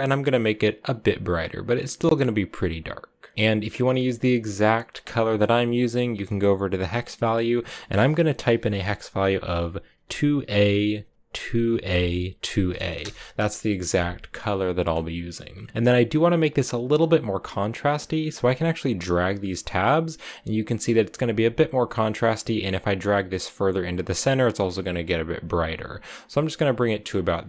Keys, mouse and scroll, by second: 4.0 click, 14.6-15.7 drag, 15.7-16.8 scroll up 2, 16.8-18.7 scroll up 1, 18.7-22.3 drag, 23.7-26.7 drag, 26.8 scroll down 7, 27.2-27.4 middle drag.